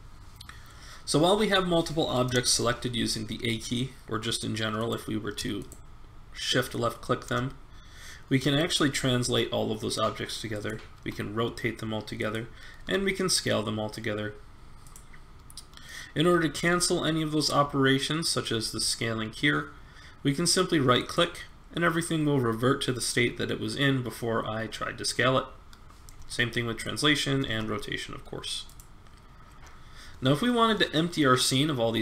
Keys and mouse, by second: 4.8-8.4 right drag, 8.9 g, 10.9 r, 12.8 s, 16.5 s, 26.2 g, 27.4 r.